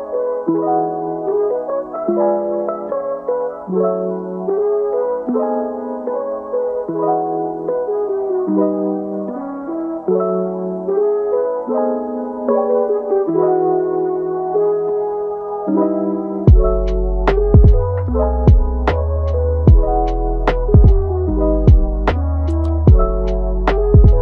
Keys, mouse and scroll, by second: 0.9 click, 1.3 scroll up 3, 1.6-2.7 middle drag, 2.7 click, 3.1 scroll down 1, 3.4-3.9 middle drag, 3.9-4.3 scroll up 2, 4.3-5.4 shift+middle drag, 5.4-5.8 scroll up 1, 5.8-6.3 middle drag, 6.3-7.4 scroll up 3, 7.4-10.4 scroll down 3, 10.4 scroll down 1, 10.7-12.0 middle drag, 12.0 click, 15.6 scroll up 1, 15.8 middle click, 16.7 scroll down 1, 18.0 scroll up 1, 18.3-21.3 middle drag, 22.3-24.2 drag.